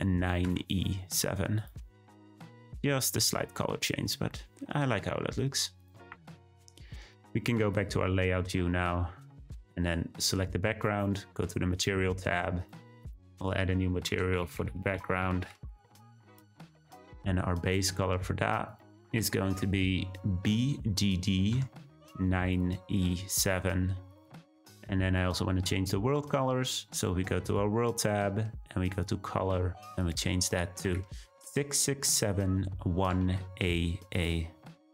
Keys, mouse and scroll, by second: 2.3-3.5 drag, 3.5-7.8 scroll down 2, 7.8 click, 8.7 scroll up 1, 9.9 click, 10.3 click, 12.6 click, 17.6 drag, 25.2 click.